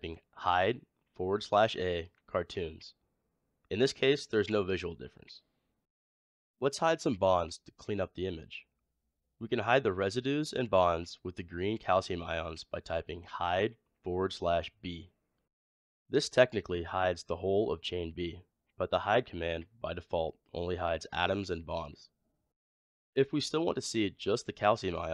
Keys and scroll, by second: 10.7 typing.